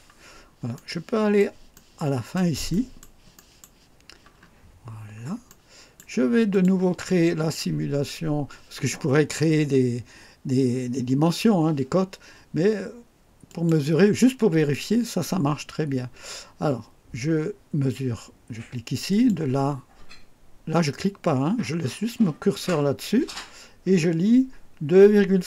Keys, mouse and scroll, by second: 0.0-0.3 scroll down 1, 0.6 right click, 1.6 right click, 2.6 right click, 3.2 right click, 4.3 scroll up 1, 4.8-5.1 scroll up 1, 5.4-6.1 right drag, 6.4 click, 13.4 click, 19.0 click.